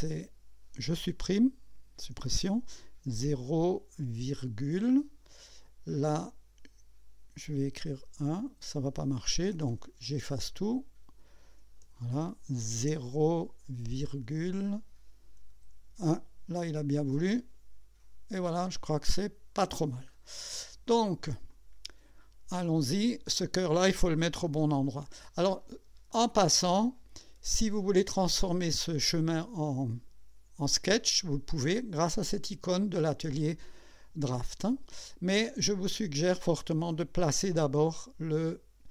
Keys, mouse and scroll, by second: 2.1 Delete, 3.1 KP_0, 7.9 KP_1, 9.4 BackSpace, 10.5 click, 11.8 Delete, 12.8 KP_0, 14.0 ,, 15.5 KP_1, 17.3 click, 18.7 scroll up 2, 19.8-20.2 scroll down 2, 20.9 click, 21.5-23.5 drag, 24.5 KP_2, 25.5 scroll up 2, 26.1-27.3 right drag.